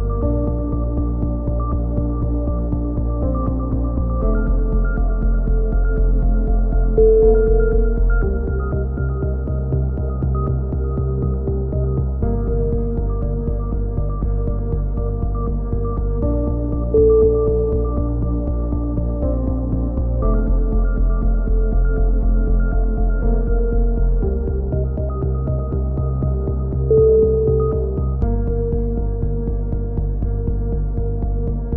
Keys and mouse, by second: 0.0-1.4 drag, 0.5 right click, 1.7 click, 4.5 a, 4.9 z, 5.2 z, 6.0 click, 7.0-9.2 middle drag, 9.2 click, 13.4 right click, 14.9 click, 17.8 a, 18.6 ctrl+r, 21.1 click, 21.5 a, 21.7 z, 22.1 click, 22.9-24.1 middle drag, 23.1 z, 27.1 k.